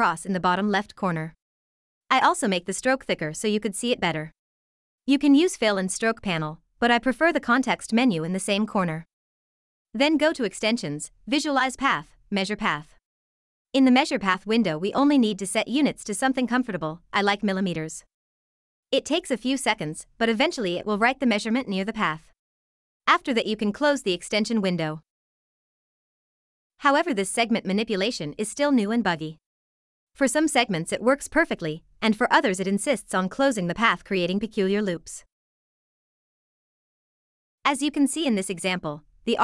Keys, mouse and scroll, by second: 9.5 click, 19.0 click, 22.9 click, 24.3 ctrl+scroll, 26.3 scroll, 28.6 click, 29.8 click, 32.1 shift+click, 34.0 ctrl+c, 34.9 click, 37.6 ctrl+v.